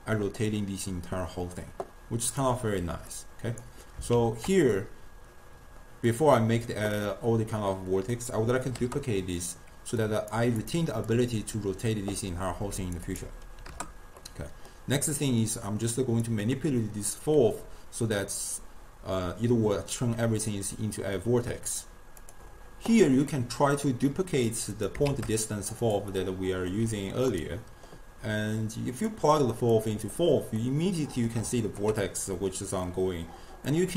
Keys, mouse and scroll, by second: 3.2-4.7 drag, 4.7 shift+d, 8.2-10.8 drag, 11.2-14.2 drag, 14.2-16.0 middle drag, 16.0 click, 23.3-24.7 middle drag, 24.7 click, 25.5 shift+d, 26.1 middle click, 26.8 g, 27.6-28.4 middle drag, 28.4-30.6 drag, 30.6-33.7 middle drag, 33.7-33.9 drag.